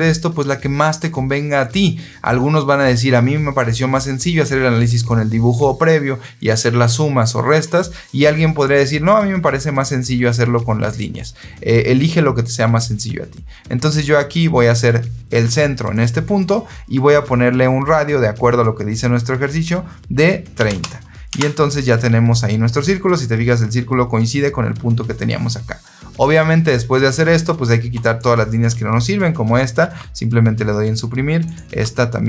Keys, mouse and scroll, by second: 15.8 click, 20.5 KP_3, 20.6 KP_0, 21.2 KP_Enter, 27.9 click, 29.7 Delete, 31.3 click, 31.6 Delete.